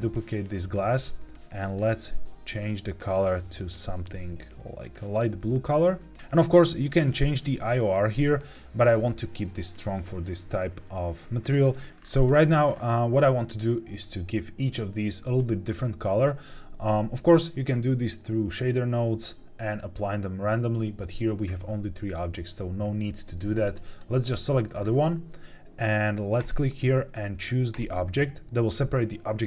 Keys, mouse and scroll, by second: 1.6 click, 6.1 scroll down 3, 6.9 scroll down 2, 7.6 scroll down 2, 11.3 click, 11.9-13.5 scroll up 8, 23.6 click, 23.8 click, 26.3-27.9 drag.